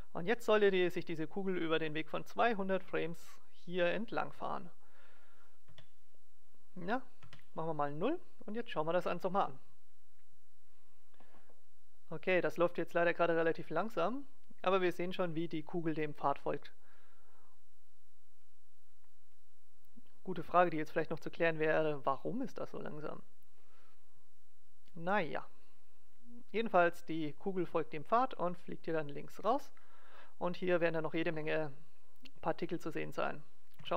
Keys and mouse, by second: 0.3-1.5 drag, 5.6 KP_0, 7.3 KP_0, 8.5-10.1 drag, 9.2 alt+a, 29.2 alt+a, 33.7 KP_7.